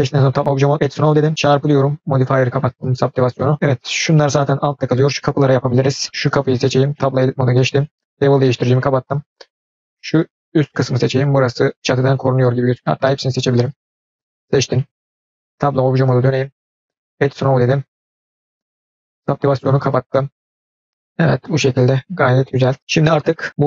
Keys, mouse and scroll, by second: 0.7 click, 1.3 click, 3.5 middle click, 3.5 scroll down 2, 4.9 scroll up 1, 5.8 scroll down 2, 6.1 shift+middle click, 6.1 scroll up 2, 6.3 click, 7.0 Tab, 8.3 click, 9.1 click, 13.3 shift+click, 16.9 Tab, 16.9 click, 19.1 click, 20.7 scroll down 2, 20.9-22.7 middle drag, 23.5 click.